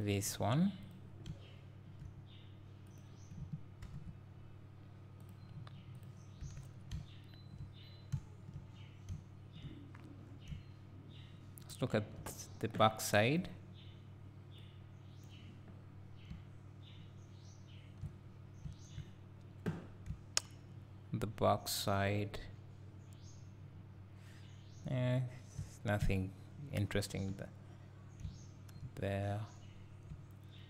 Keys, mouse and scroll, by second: 3.8 ctrl+l, 5.2-6.5 drag, 6.5 Tab, 6.6 scroll down 1, 8.0 scroll down 1, 8.8-9.1 scroll up 1, 9.1 `, 13.6 click, 19.8-20.1 scroll up 1, 20.1 `, 25.7 scroll down 1, 26.0 `, 29.4 scroll up 1, 30.1 `.